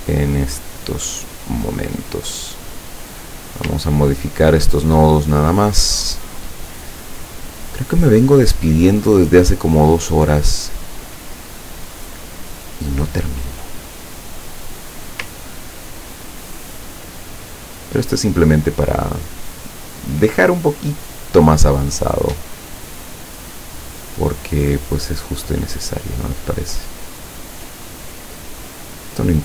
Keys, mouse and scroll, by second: 1.2 click, 1.8 click, 3.1 click, 4.0-5.1 ctrl+scroll up 1, 5.1-6.3 ctrl+drag, 7.8 click, 9.4-12.1 drag, 12.5 click, 13.6-15.1 drag, 15.6-16.1 ctrl+scroll down 2, 19.7 click, 24.8 click, 29.0 click.